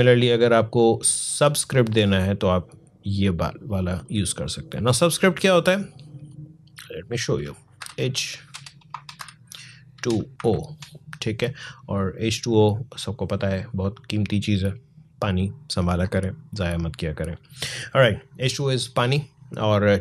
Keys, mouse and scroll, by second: 3.8-7.6 drag, 7.6 h, 8.3 BackSpace, 9.0 h, 10.3 shift+o, 12.3-19.3 drag.